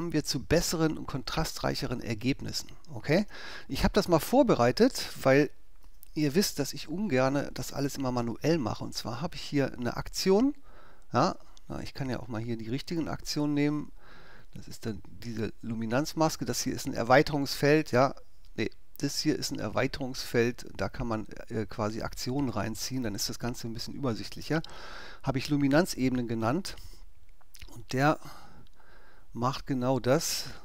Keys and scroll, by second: 5.9 BackSpace.